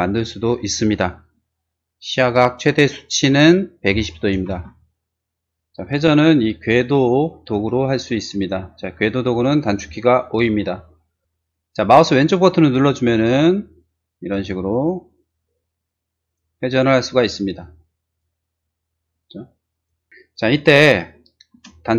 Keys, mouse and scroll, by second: 3.8-4.2 typing, 4.5 Return, 5.8 middle click, 11.1 click, 11.2 o, 12.3-14.2 drag, 14.9 click, 15.8 click, 16.0 click, 16.7 click, 16.8 right click, 17.1 click, 17.8 click, 18.6 click, 19.2 click, 21.6 space.